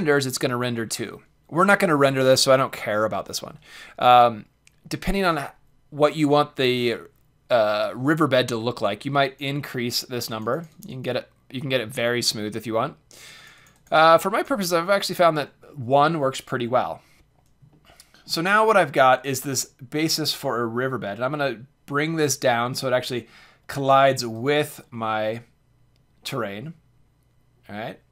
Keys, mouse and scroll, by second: 9.2-12.9 drag, 13.2-16.3 drag, 17.7-19.3 middle drag, 19.3-21.3 drag, 24.3-24.9 right drag, 24.9-25.2 middle drag, 25.0 click, 25.4-25.9 drag, 25.4-26.1 middle drag, 26.3 middle click, 26.5 middle click.